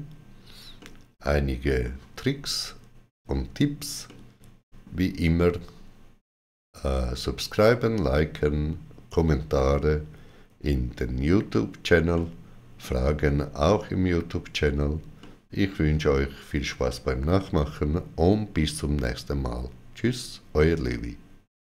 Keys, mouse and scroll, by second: 0.6 middle click, 3.9 shift+middle click, 12.0 shift+middle click, 15.0 shift+middle click.